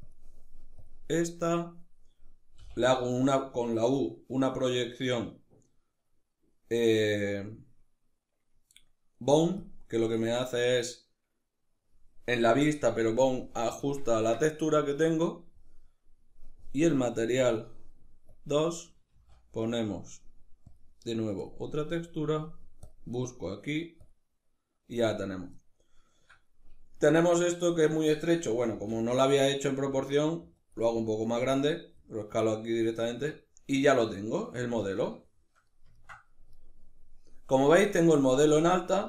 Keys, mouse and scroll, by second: 2.2 u, 13.7-17.1 ctrl+middle drag, 17.1 click, 18.0 click, 18.8 shift+a, 21.6-25.3 drag, 25.3-30.4 ctrl+middle drag, 28.3 s, 30.4 click, 32.7 Tab, 33.5-39.0 middle drag.